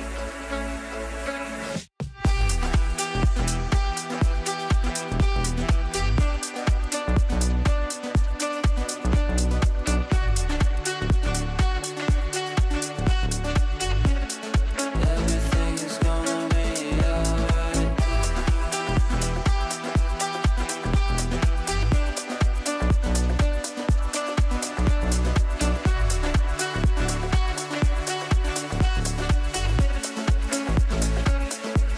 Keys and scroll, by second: 6.8 shift+Page_Down.